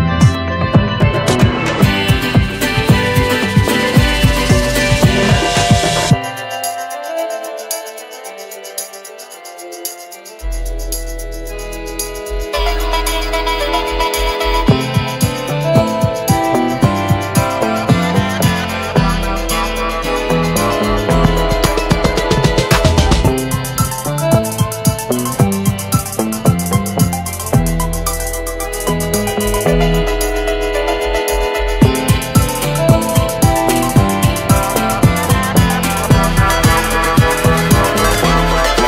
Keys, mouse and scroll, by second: 1.7 click, 3.9 space, 4.4-5.0 ctrl+click, 6.2 space, 6.7-8.9 ctrl+drag, 27.8 F5, 30.0-32.5 drag, 33.5 shift+F5, 35.1 click, 35.8 scroll down 1.